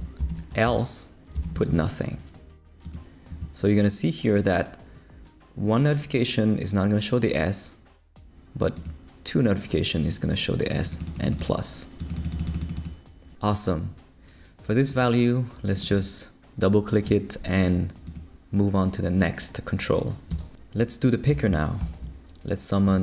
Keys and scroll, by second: 0.3 shift+;, 0.6 shift+space, 1.4 shift+', 20.3 Return, 21.8 shift+super+l, 22.8-23.0 typing.